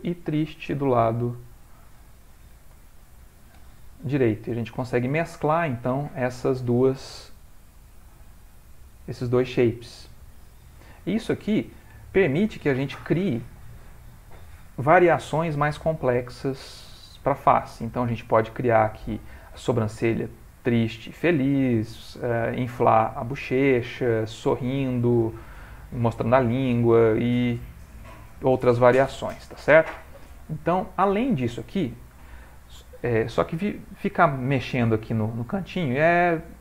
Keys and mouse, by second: 0.6 click, 1.5 click, 4.1 ctrl+middle click, 4.6 middle click, 6.3 middle click, 6.5 ctrl+middle click, 7.8 click, 10.8 middle click, 11.4 ctrl+middle click, 11.8 middle click, 16.4 middle click, 17.4 ctrl+middle click, 21.4-24.1 middle click, 23.5 middle click, 25.6 middle click, 26.0 middle click, 27.5 ctrl+middle click, 28.0 middle click, 30.4 middle click, 32.4 middle click, 36.0 click.